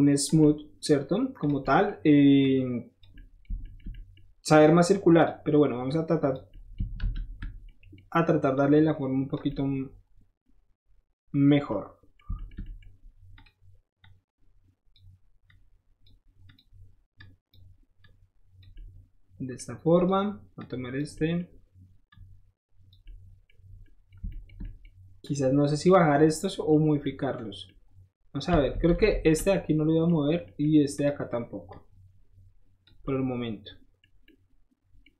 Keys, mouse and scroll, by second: 0.4 shift+middle click, 1.4 click, 1.4 middle click, 2.3 click, 3.0 middle click, 3.5 shift+middle click, 3.8 shift+middle click, 4.1 shift+middle click, 4.5 shift+click, 5.1 shift+click, 5.2 shift+middle click, 5.8 shift+click, 6.5-6.8 middle drag, 6.9 ctrl+z, 7.6 middle click, 8.5 click, 9.4-11.4 middle drag, 11.6 middle click, 13.3 shift+click, 14.0 shift+click, 15.4 click, 16.4 click, 17.1 click, 18.0 click, 18.7 middle click, 19.9 click, 20.5 click, 21.1 middle click, 22.0 click, 23.0 middle click, 23.6 middle click, 23.8 middle click, 24.2 shift+middle click, 25.2 shift+click, 25.6 shift+middle click, 25.7 shift+middle click, 26.8 middle click, 27.6 middle click, 28.7 ctrl+z, 28.9 ctrl+z, 29.3 middle click, 30.2 scroll up 1, 30.4 middle click, 30.9 click, 31.6-32.8 drag, 33.0 middle click, 34.0 scroll up 1, 34.1-35.1 middle drag.